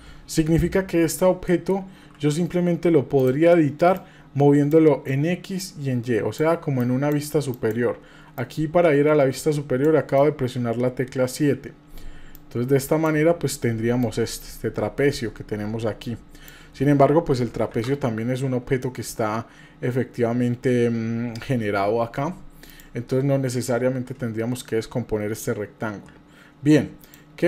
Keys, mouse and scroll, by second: 0.4 Page_Down, 1.5 middle click, 2.0 KP_7, 3.2 click, 3.9 click, 5.6 click, 6.8 click, 7.6 click, 8.3-9.8 drag, 10.4 KP_7, 12.3 click, 14.1-16.5 drag, 17.7 shift+a, 22.7 click, 27.0 click.